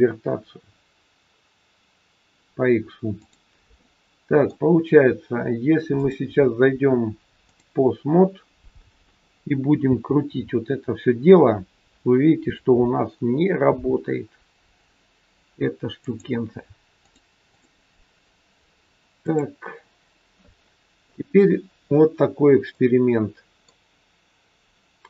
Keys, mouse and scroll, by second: 3.2 click, 3.7 middle click, 6.0 click, 9.9 r, 17.0 click, 19.1 click, 20.6 middle click, 22.0 scroll down 1, 22.6 middle click.